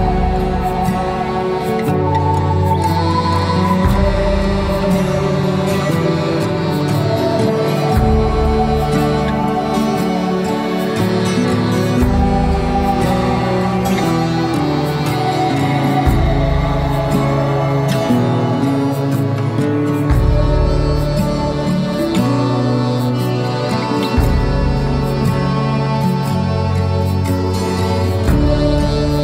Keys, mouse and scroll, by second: 0.9-5.5 drag, 5.5-6.0 scroll down 2, 6.0 middle click, 6.5-6.8 scroll up 2, 6.8-9.5 middle drag, 8.7-9.1 scroll up 2, 9.5 scroll up 2, 10.4 click, 11.7 shift+click, 12.1-12.5 scroll down 2, 12.5 middle click, 13.4-13.9 scroll up 1, 13.9 shift+middle click, 14.2-15.0 scroll up 1, 15.0 shift+click, 15.7-16.8 scroll up 1, 16.8-21.7 drag, 22.8-24.6 drag, 24.6-25.0 scroll down 2, 25.0 middle click, 25.7 scroll down 1, 26.5 shift+middle click, 27.2 Tab, 27.6-29.1 middle drag, 29.1 click.